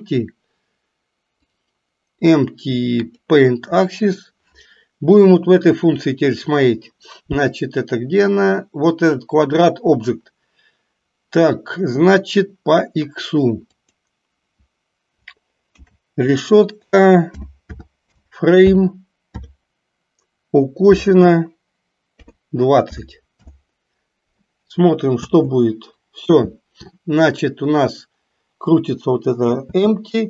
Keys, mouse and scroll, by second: 1.5-3.3 drag, 13.8-23.6 drag, 25.2 space, 29.8 space.